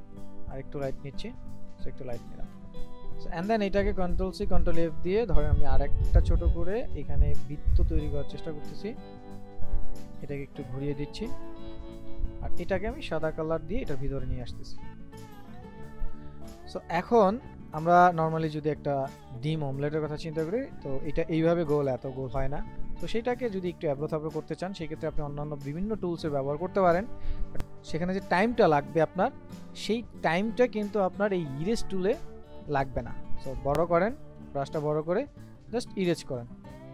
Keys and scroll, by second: 4.1 ctrl+c, 4.4 ctrl+f.